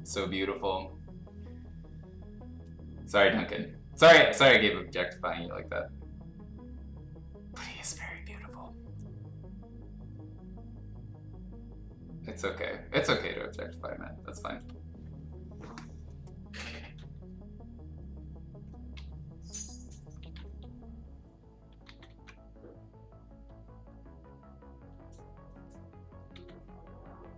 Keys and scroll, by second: 18.9 x, 20.2 ctrl+z, 20.4 x, 21.8 ctrl+z, 22.1 ctrl+z, 26.3 x.